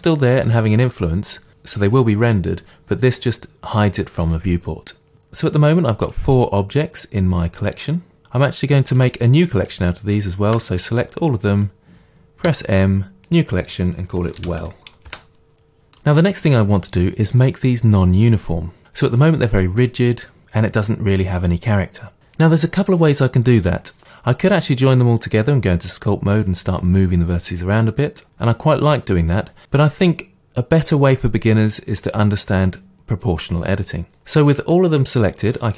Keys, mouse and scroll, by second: 5.1 click, 5.7 click, 6.0 click, 6.4 click, 9.0-10.8 shift+drag, 10.8-35.7 middle drag, 12.5 m, 14.6 l.